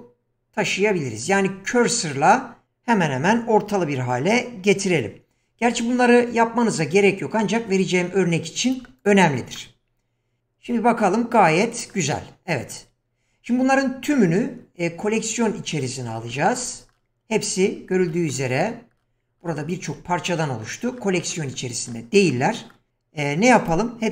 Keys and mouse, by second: 4.7 g, 11.0-11.9 middle drag.